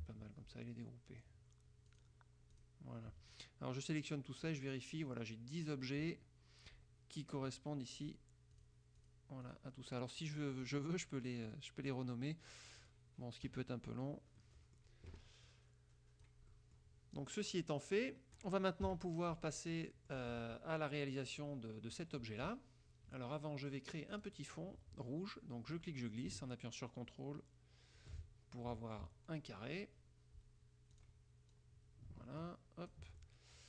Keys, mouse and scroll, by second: 2.0 click, 2.7 click, 3.4-4.3 drag, 8.1 click, 8.7 click, 9.1 click, 9.5 click, 10.7 click, 11.5 click, 11.9 click, 12.9 click, 13.7 KP_Subtract, 14.5 click, 15.6-16.6 drag, 16.7 click, 17.3-18.7 drag, 19.0 KP_Subtract, 19.9 click, 22.3 click, 24.3 click, 25.9-28.3 drag, 28.8 click, 31.1 click, 31.7-33.2 drag, 33.3 ctrl+click.